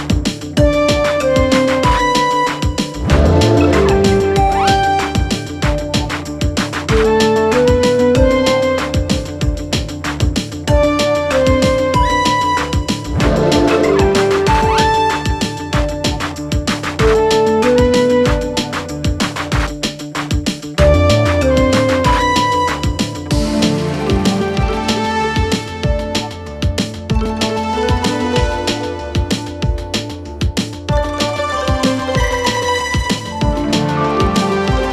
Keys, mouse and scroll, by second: 6.0-7.2 typing, 8.4 click, 13.7 ctrl+d, 14.1-15.1 click, 20.9-22.4 typing, 24.8-26.8 click, 29.7-30.4 click.